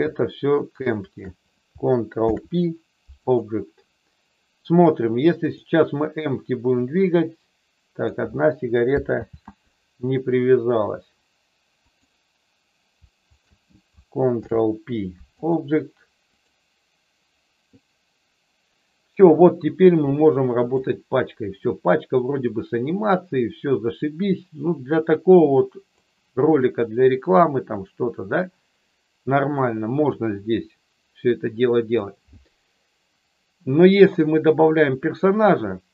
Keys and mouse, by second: 1.0 shift+click, 2.2 ctrl+p, 6.8-8.0 drag, 9.2 ctrl+z, 11.8 click, 13.3 shift+click, 14.3 ctrl+p, 16.3 click, 17.8-20.7 drag, 21.7-26.1 drag, 29.5-31.9 drag.